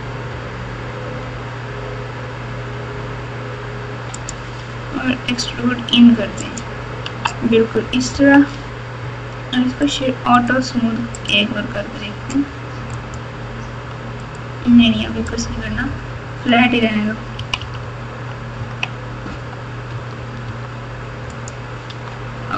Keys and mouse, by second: 0.3 i, 5.0 e, 7.0 Tab, 8.1 KP_6, 11.3-13.1 right drag, 14.3-15.4 right drag, 17.3 KP_6, 17.5 KP_6, 17.8 KP_6, 18.5 KP_6, 19.9 Tab, 20.4 Tab, 21.3 click, 21.8 Tab.